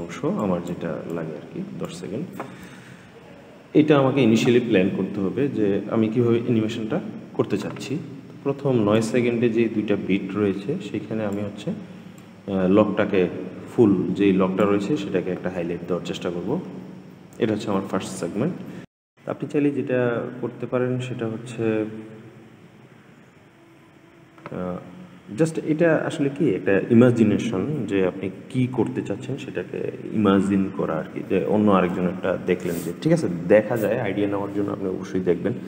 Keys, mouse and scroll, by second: 8.7-15.0 drag.